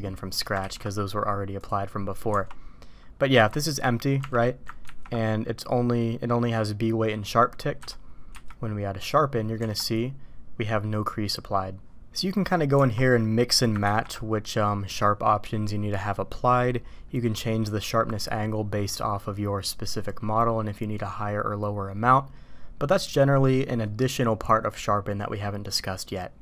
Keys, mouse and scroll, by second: 0.6 ctrl+e, 2.3 Tab, 3.3 Tab, 4.2 Tab, 4.9 ctrl+`, 8.3 q, 9.6 Tab, 12.3 middle click, 12.8 Tab, 13.8 ctrl+`.